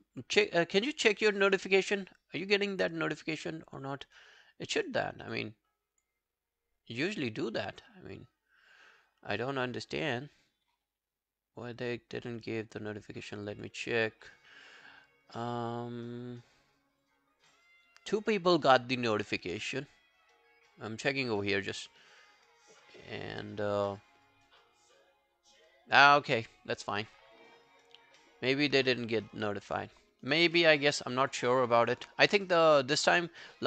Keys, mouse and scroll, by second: 1.4 alt+click, 3.7 alt+click, 4.8 alt+right click, 5.3 alt+click, 6.0 alt+click, 8.7 alt+scroll down 3, 9.7 alt+scroll down 8, 13.6 alt+click, 26.6 alt+click, 30.6 alt+middle click, 31.0 alt+scroll down 1, 31.2 alt+click, 31.5 alt+middle click, 31.7 alt+right click, 32.5 alt+scroll down 2, 32.7 alt+click.